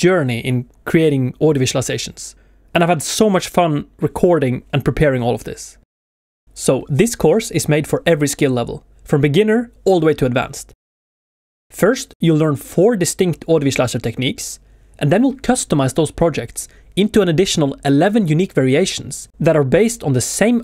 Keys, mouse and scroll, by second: 1.4 shift+middle click, 1.4 shift+scroll up 1, 2.1 shift+scroll up 1, 2.6 alt+scroll down 1, 3.0 alt+scroll up 1, 3.2 alt+scroll down 1, 9.7 shift+middle click, 10.9 shift+middle click.